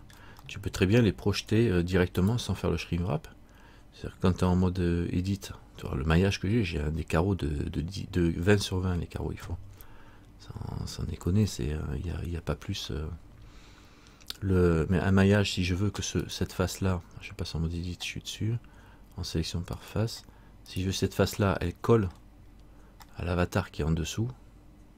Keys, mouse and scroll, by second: 1.6 middle click, 2.4 right click, 4.6 Tab, 14.8 middle click, 16.4 right click, 20.9 click, 20.9 right click, 22.3 middle click, 22.7-23.2 scroll up 3, 23.3 middle click.